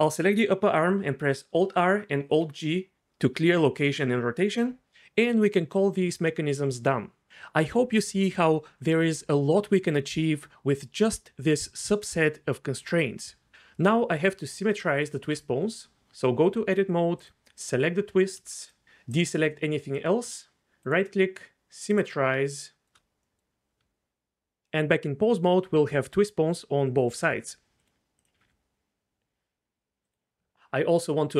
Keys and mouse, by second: 1.1 alt+g, 2.2 alt+r, 14.1 Tab, 17.2 click, 17.6 click, 18.6 shift+click, 20.9-22.0 drag, 22.5 shift+click, 23.8 Tab, 25.4 click, 25.8 r, 25.9 r, 26.5 click, 27.2 r, 27.3 r, 28.4 r, 28.4 r.